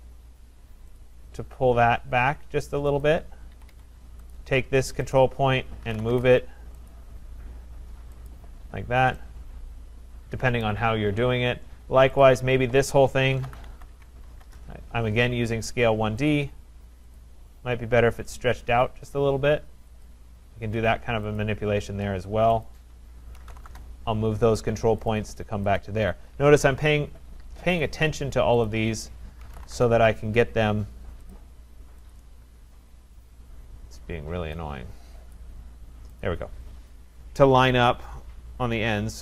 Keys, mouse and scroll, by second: 1.2 click, 3.0 click, 3.6 Escape, 3.7 Escape, 4.4 click, 5.2 click, 5.6-6.5 typing, 6.9 click, 8.3 click, 8.7-9.1 scroll up 4, 10.6 right click, 11.5 scroll up 2, 11.7 scroll, 12.2 click, 13.1-14.5 typing, 15.7 middle click, 16.3 click, 17.2 click, 20.1 click, 21.4 click, 22.7 shift+click, 23.1-24.2 typing, 25.2 click, 25.8 click, 26.2 Escape, 26.2 shift+click, 26.4 Escape, 27.1-27.5 scroll, 27.3-28.0 typing, 27.8 click, 28.7 click, 29.3-30.2 typing, 31.3 click, 31.4 Return, 32.1 click, 33.5 scroll, 34.8 scroll, 35.3 click, 36.2 click, 36.5-37.1 scroll, 38.2-38.9 scroll, 38.9 scroll.